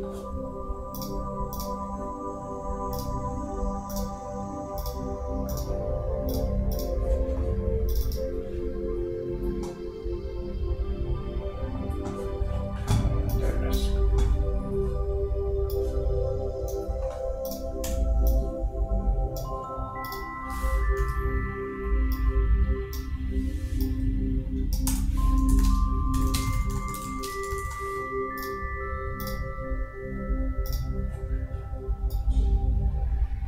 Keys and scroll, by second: 21.1 super+d.